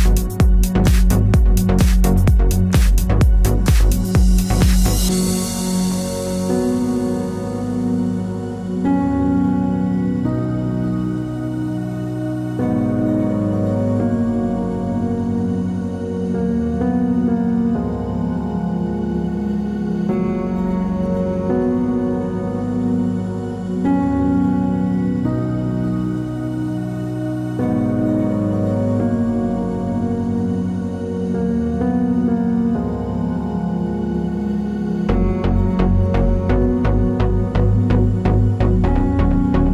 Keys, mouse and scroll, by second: 1.9 click, 22.3-22.6 alt+scroll up 1, 25.6-26.0 alt+scroll up 1, 27.6 ctrl+j, 29.3 click, 32.3 click, 37.1 click.